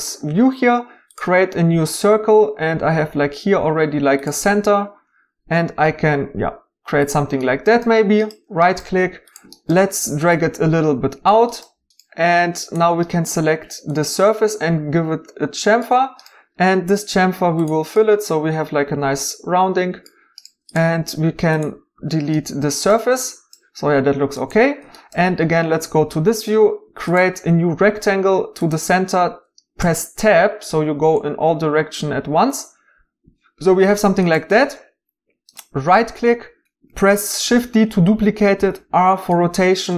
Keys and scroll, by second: 22.0 x, 29.8 Tab, 37.4 shift+d, 38.5 r.